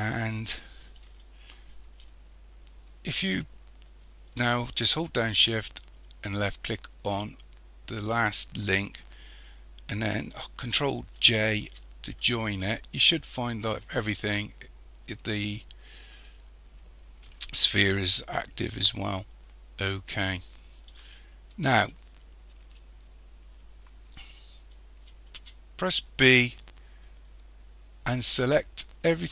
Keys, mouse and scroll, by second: 0.0-3.0 shift+middle drag, 6.3 shift+click, 11.1 ctrl+j, 19.5-20.2 scroll down 3, 21.1-22.3 shift+middle drag, 22.3-25.3 scroll up 2, 25.3 b.